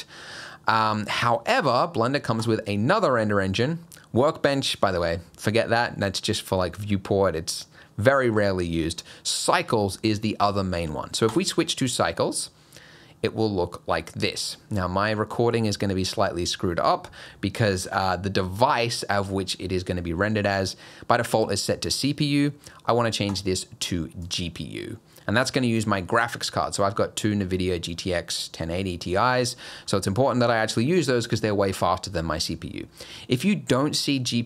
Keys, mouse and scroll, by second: 2.4 click, 23.3 click, 29.9 scroll up 2, 33.2 click.